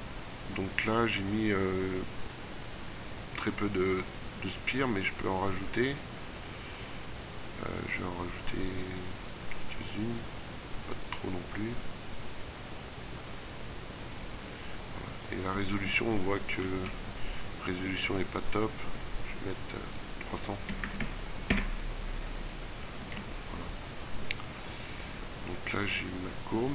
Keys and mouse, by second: 21.0 KP_0.